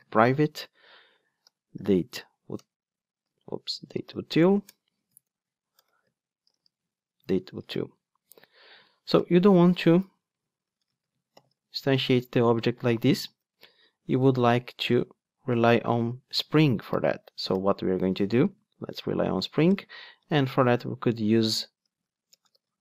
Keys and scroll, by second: 2.6 Return, 3.3 super+z, 4.6 super+z, 4.7 Return, 7.7 alt+super+l, 13.5 Return, 15.7 alt+shift+Left, 18.6 alt+shift+Right, 21.8 Tab.